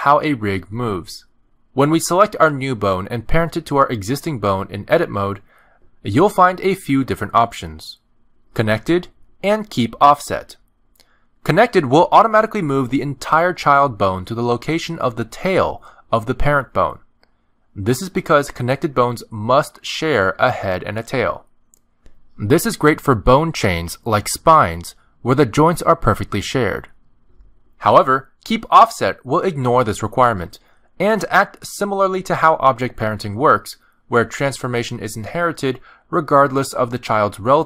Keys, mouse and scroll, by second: 4.6 ctrl+p, 13.5 shift+middle click, 14.0-14.3 scroll down 2, 14.3 middle click, 15.6 click, 16.2 shift+middle click, 16.5 g, 17.7 shift+middle click, 18.0-18.7 scroll up 1, 18.7 scroll up 2, 18.8 shift+click, 19.1 g, 20.0 shift+click, 20.5 middle click, 20.9 g, 23.2 middle click, 24.0 click, 24.5 middle click, 25.2 g, 26.4 click, 27.0 g, 28.4 ctrl+p, 30.8 click, 31.1 g, 31.7 click, 32.2 click, 32.7 click, 33.1 g, 34.4 Tab, 34.9 ctrl+Tab, 35.6 click, 36.1 r.